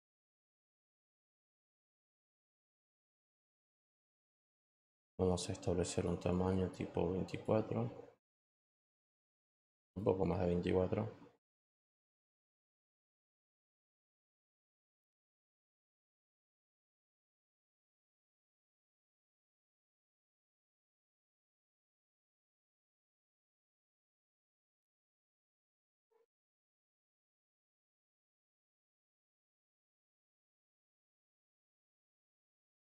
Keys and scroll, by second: 0.0-2.3 typing, 25.8 t, 29.6-31.1 typing.